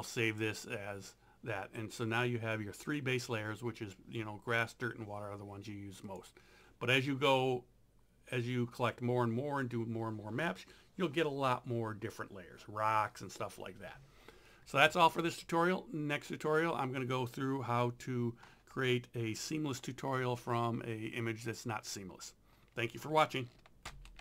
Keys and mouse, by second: 2.8 click, 6.1 click, 23.9 alt+F9.